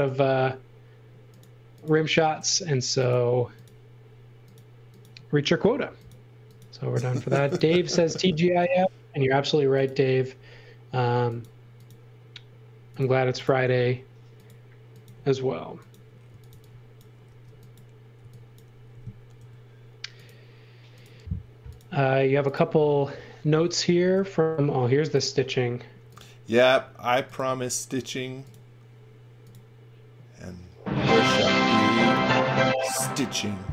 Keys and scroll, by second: 16.0-18.2 typing, 19.3 l, 31.3 l.